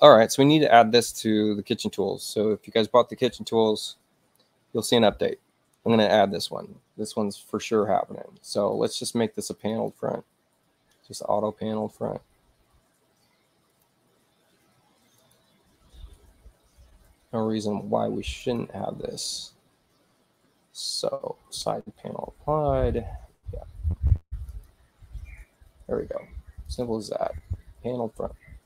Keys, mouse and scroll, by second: 8.7 click, 9.5 click, 9.8 click, 13.7 click, 15.1 click, 18.4 click.